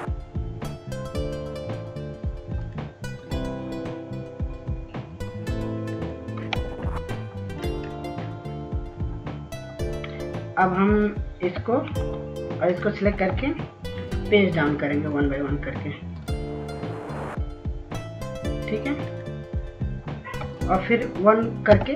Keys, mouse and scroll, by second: 10.6 right click, 11.7-12.3 scroll down 1, 15.7 shift+click, 18.2 click.